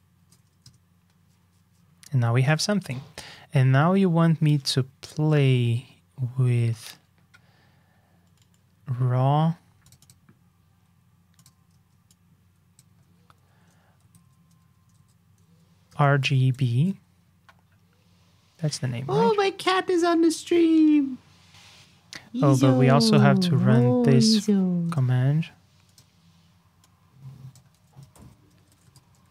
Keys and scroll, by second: 0.1 super+v, 2.8 super+j, 23.9 alt+shift+Down, 27.7 super+d.